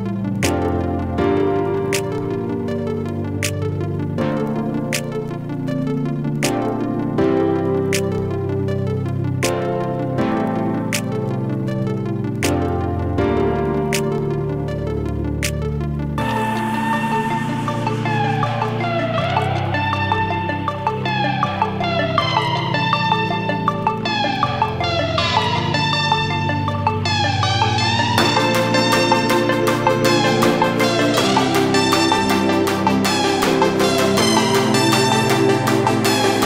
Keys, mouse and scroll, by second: 1.8 ctrl+space, 1.9 click, 2.2 ctrl+space, 2.6 click, 3.3 ctrl+space, 3.4 ctrl+click, 3.7 ctrl+space, 6.1 click, 6.4-10.9 shift+drag, 13.3 ctrl+space, 13.4-16.3 ctrl+drag, 17.2 right click, 25.6 click, 26.3 4, 27.8 click, 29.2 ctrl+space, 29.3 ctrl+click, 29.6 ctrl+space, 30.2 space, 30.7 space, 34.7 click, 35.2 ctrl+space, 35.3 ctrl+click, 35.6 ctrl+space.